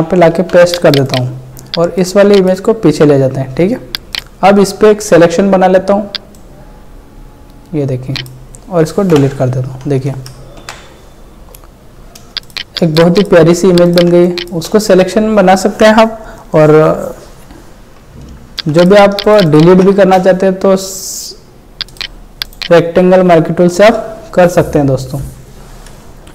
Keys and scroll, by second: 9.1 Delete, 10.6 ctrl+d, 12.4 ctrl+space, 12.9 ctrl+space, 14.7 space, 18.8 ctrl+space, 20.2 space.